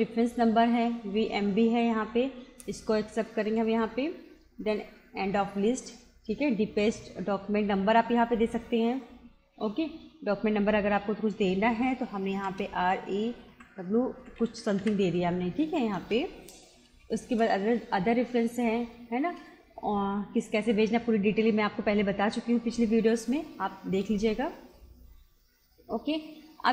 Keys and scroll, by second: 3.4 Return, 4.8 Return, 8.3 BackSpace, 12.3-14.8 typing, 16.0 Return, 17.3 Return, 19.3 Return, 23.3 Return.